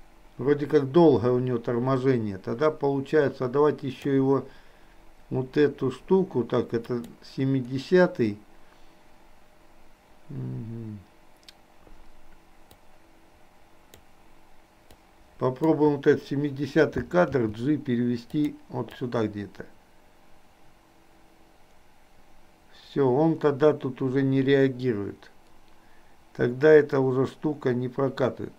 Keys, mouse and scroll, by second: 6.9 click, 12.8-14.1 drag, 14.9 click, 17.4 g, 19.1-28.5 drag.